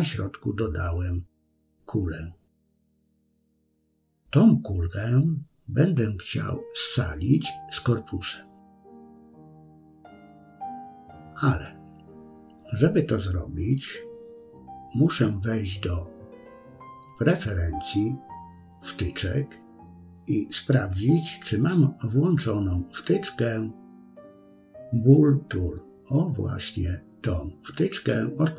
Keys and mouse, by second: 0.5-1.1 middle drag, 1.4-2.2 middle drag, 2.8 KP_3, 5.2 KP_1, 8.5-9.8 middle drag, 10.8 KP_3, 12.1 click, 15.9-17.6 drag.